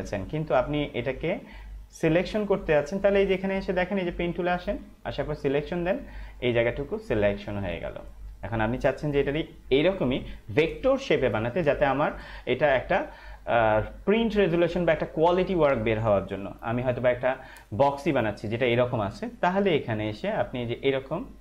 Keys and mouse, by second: 2.7 space, 2.8 click, 3.2 space, 4.5 click, 7.4 ctrl+-, 20.1 click.